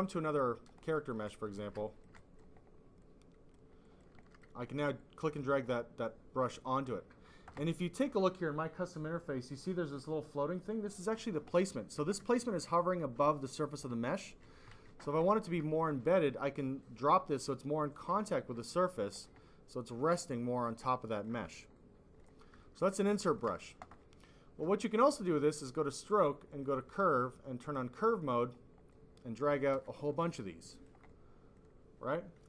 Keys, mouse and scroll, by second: 0.1 click, 0.8 click, 1.2 click, 1.8 alt+click, 2.1 double click, 2.9 click, 3.8 click, 4.2 alt+click, 4.3 double click, 4.9 click, 5.6 double click, 6.4 click, 11.5 click, 12.1 alt+click, 12.6 click, 13.9 ctrl+z, 14.8 ctrl+z, 15.0 alt+click, 15.4 click, 16.8 click, 18.5 click, 19.3 click, 20.6 click, 21.7 click, 22.5 alt+click, 23.1 alt+click, 25.0 click, 26.4 click, 26.6 click, 27.6 click, 28.8 click, 29.8 alt+click, 30.6 alt+click, 31.0 click.